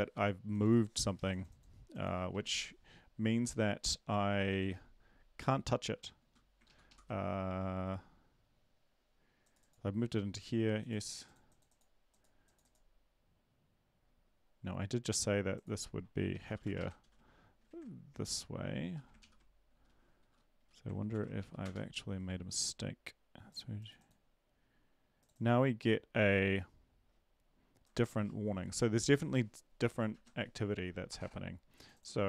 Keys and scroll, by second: 2.4 ctrl+`, 6.6 Up, 6.6 ctrl+Left, 6.9 ctrl+Left, 16.5 typing, 16.8 Right, 17.0 ctrl+d, 18.2 ctrl+`, 18.8 Up, 19.2 ctrl+;, 19.7 Up, 20.2 Down, 21.1 ctrl+l, 21.4 Up, 21.6 Return, 30.1 ctrl+`.